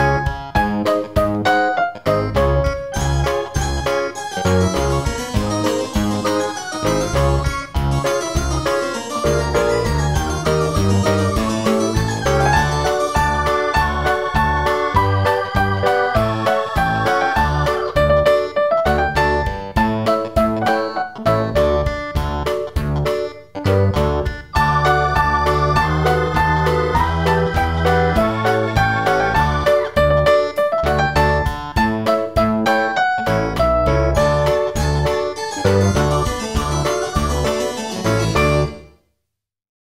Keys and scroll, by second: 11.5 o.